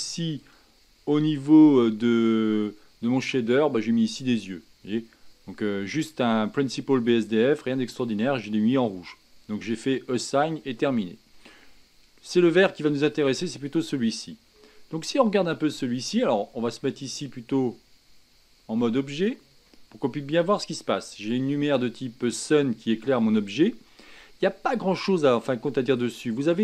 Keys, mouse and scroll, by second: 0.4-4.6 drag, 5.9-12.4 middle drag, 13.7 click, 14.5-19.2 middle drag, 19.2 Tab, 19.7 middle click, 20.6-21.7 middle drag, 21.7-23.7 scroll down 1, 23.7-24.4 scroll down 1, 26.4-26.6 scroll down 1.